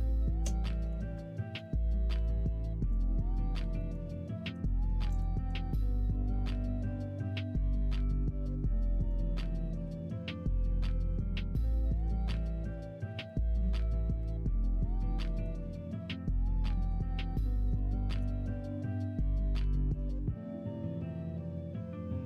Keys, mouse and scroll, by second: 1.0 ctrl+r, 2.2 middle click, 2.9 click, 3.3 middle click, 4.6 middle click, 5.0 shift+click, 6.0 f, 6.5 middle click, 7.2 middle click, 8.1 click, 9.8 f, 11.3 middle click, 11.7 shift+middle click, 12.6 click, 13.1 shift+click, 14.2 f, 14.7 click, 15.0 shift+z, 16.7 shift+z, 17.5 shift+click, 17.9 shift+middle click, 18.7 f, 19.4 click, 19.8 shift+click, 20.3 shift+middle click, 21.4 f, 22.0 click.